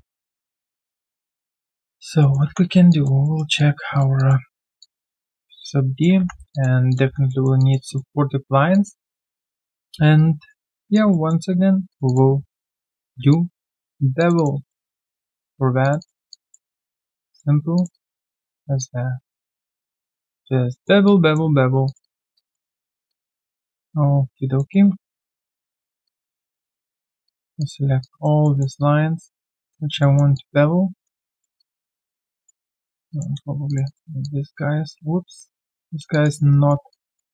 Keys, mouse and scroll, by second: 0.0 right click, 0.5 alt+click, 1.5 alt+middle click, 1.9 alt+click, 2.2 alt+middle click, 2.8 3, 2.9 alt+click, 3.2 alt+middle click, 3.6 alt+click, 4.2 alt+click, 4.5 alt+middle click, 4.8 alt+click, 6.5 alt+click, 6.9 alt+click, 7.3 alt+middle click, 7.6 alt+click, 7.9 alt+middle click, 8.3 alt+right click, 8.7 alt+click, 9.1 alt+middle click, 9.4 alt+right click, 9.6 alt+click, 9.9 q, 10.1 right click, 11.1 alt+middle click, 12.0 double click, 12.8 shift+click, 12.9 shift+double click, 13.3 alt+click, 14.2 shift+click, 14.3 shift+double click, 14.7 alt+double middle click, 15.1 alt+click, 15.8 shift+click, 16.3 alt+click, 16.9 alt+middle click, 17.3 alt+click, 17.7 shift+click, 17.9 shift+double click, 18.3 shift+click, 18.8 alt+click, 20.2 shift+click, 20.7 alt+middle click, 21.0 alt+click, 21.8 shift+click, 22.0 shift+double click, 22.3 alt+double click, 22.7 alt+middle click, 23.1 alt+click, 23.4-23.7 alt+scroll down 1, 23.7 alt+click, 24.6 alt+middle click, 25.3 shift+click, 27.2 shift+click, 28.0 alt+click, 28.4 alt+middle click, 28.8 alt+click, 30.0 alt+middle click, 30.3 alt+click, 31.2 alt+middle click, 31.6 alt+click, 32.3 alt+right click, 32.6 alt+middle click, 32.9 alt+right click, 33.1 alt+click, 33.7 shift+click, 33.8 shift+double click, 34.2 alt+double click, 35.0 ctrl+z, 35.4 ctrl+z, 36.1 alt+click, 36.5 alt+right click, 36.9 alt+click.